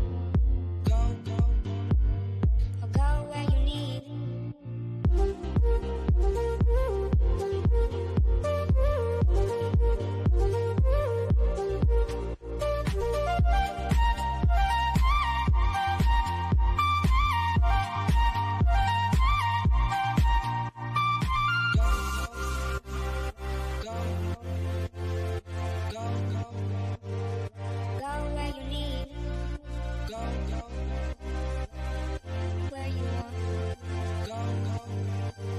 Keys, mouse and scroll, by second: 0.4 Return, 1.5 click, 4.3-7.2 middle drag, 7.2 click, 13.6 click, 17.0 click, 18.1 Right, 19.6 click, 20.1-20.8 scroll down 1, 20.9 shift+middle click, 22.4 click, 29.5 scroll down 1, 30.9 middle click, 31.7 scroll down 1, 33.1 click.